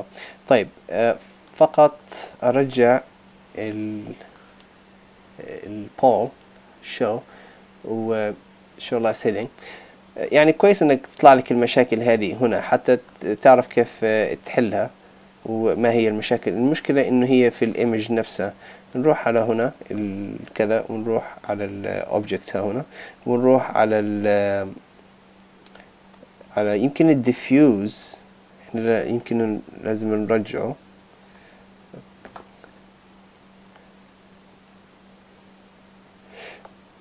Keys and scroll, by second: 32.7 super+v, 33.2 Tab.